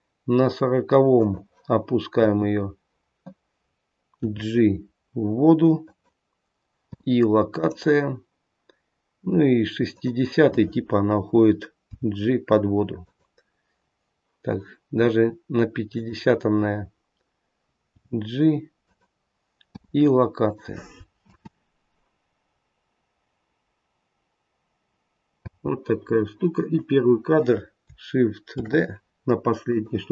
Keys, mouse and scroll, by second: 1.2 click, 2.0 i, 4.2 g, 6.7 i, 9.8 click, 11.8 g, 15.8 click, 17.8 g, 19.5 i, 21.2 space, 25.3 space, 26.7 click, 28.5 shift+d, 30.0 space.